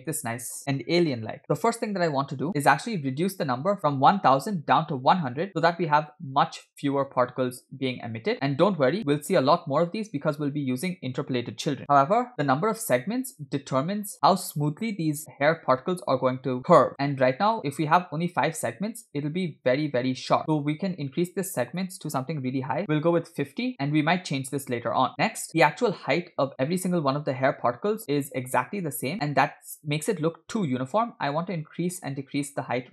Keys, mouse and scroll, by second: 3.8-5.2 drag, 4.6 0, 5.9-7.2 middle drag, 8.3 middle click, 21.7-23.7 drag, 25.3 scroll down 2, 25.5 middle click, 28.1-29.1 middle drag.